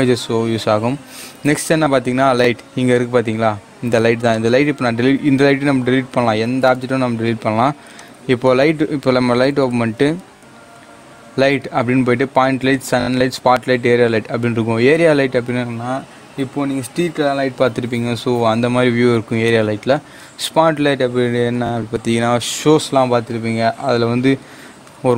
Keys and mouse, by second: 4.2 click, 5.7 x, 6.5 \, 7.9 shift+a.